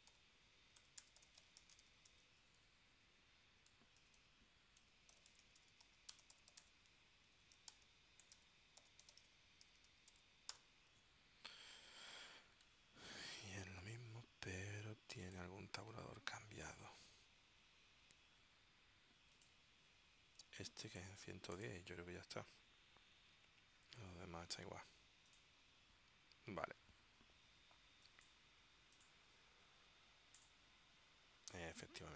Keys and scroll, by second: 0.0-10.5 typing.